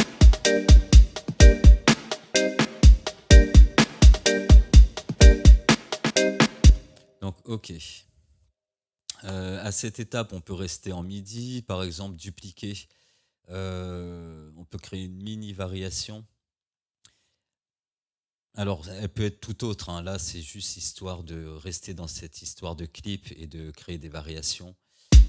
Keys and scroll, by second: 6.7 space, 25.1 space.